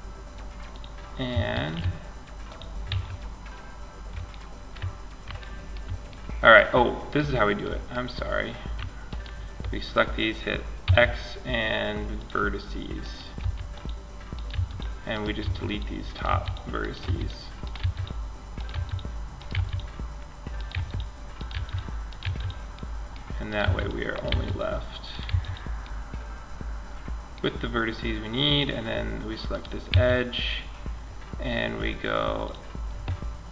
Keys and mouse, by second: 0.0-2.1 drag, 0.7 ctrl+a, 2.1 z, 6.3-13.1 drag, 10.1 x, 12.6 x, 13.7-18.7 typing, 19.9 x, 20.7 x, 21.4 click, 21.4 x, 22.8 x, 23.5 x, 24.5 x, 28.7-30.3 right drag, 29.1 x, 32.8 x.